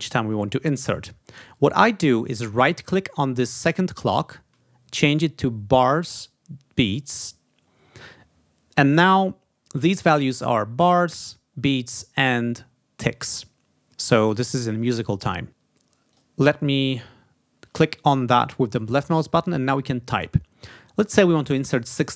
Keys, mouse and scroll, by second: 2.4 right click, 6.8 click, 15.9 click.